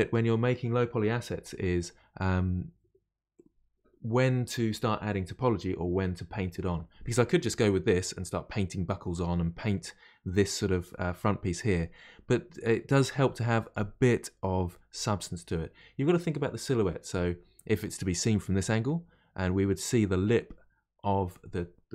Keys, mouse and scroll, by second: 7.2-12.2 middle drag, 17.6-20.6 middle drag.